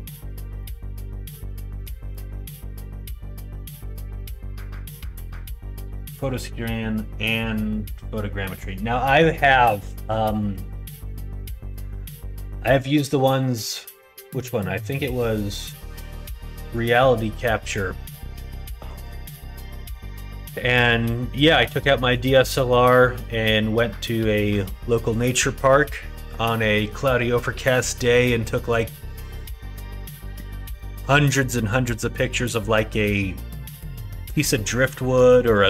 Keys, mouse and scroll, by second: 0.5 middle click, 0.6 right click, 1.2-5.2 middle drag, 1.2 right click.